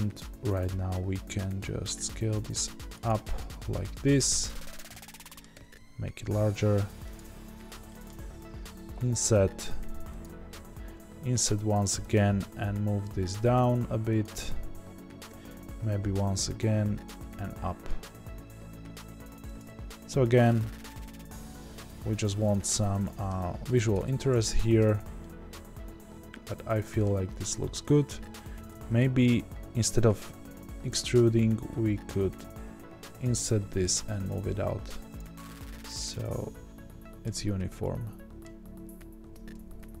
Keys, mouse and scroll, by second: 5.5 e, 8.3-8.6 scroll up 2, 8.6 i, 12.1 g, 17.0 click, 17.1 e, 22.6-40.0 middle drag, 23.3-24.0 scroll down 2, 24.0 ctrl+z, 24.8 Tab, 27.1-27.4 scroll down 2, 27.4-28.0 scroll up 2, 28.0 ctrl+z, 31.1 1, 33.6 g.